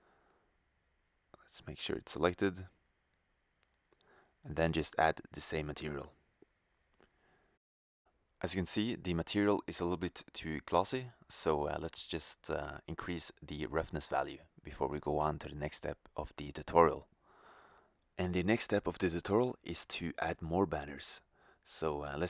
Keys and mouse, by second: 3.2 click, 4.5 middle click, 5.1-6.2 drag, 7.2 shift+z, 14.0-15.0 drag, 17.1-18.1 drag, 19.2-20.0 drag, 20.7 shift+z.